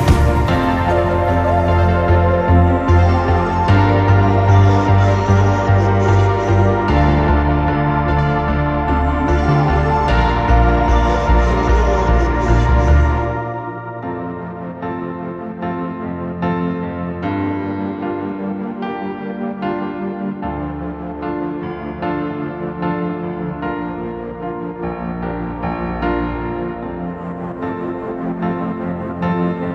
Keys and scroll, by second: 27.7 v.